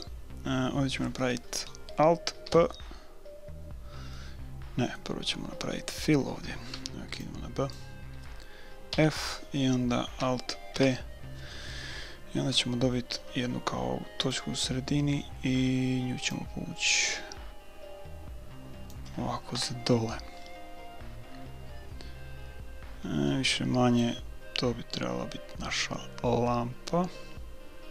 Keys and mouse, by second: 0.0-1.8 middle drag, 2.5 alt+p, 4.2-5.7 middle drag, 6.8 b, 8.9 f, 10.7 alt+p, 12.6-14.3 middle drag, 14.3 click, 14.9-16.1 right drag, 16.4-18.1 drag, 19.5 KP_1, 21.4 middle click, 23.3-27.9 middle drag.